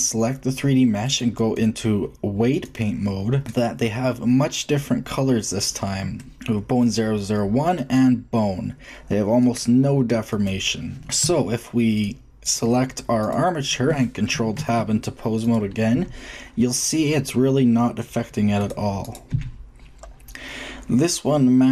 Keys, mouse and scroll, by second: 3.0-5.2 drag, 5.6-7.3 middle drag, 7.7-9.6 drag, 9.6-10.9 middle drag, 10.9-12.5 drag, 11.2 Tab, 13.6 click, 14.5 ctrl+Tab, 15.9 g, 19.1-21.6 drag, 19.2 g.